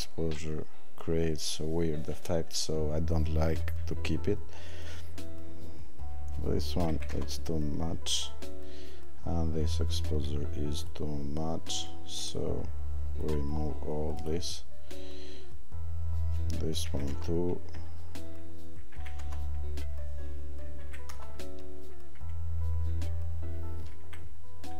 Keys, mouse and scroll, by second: 6.9 click, 14.2 click.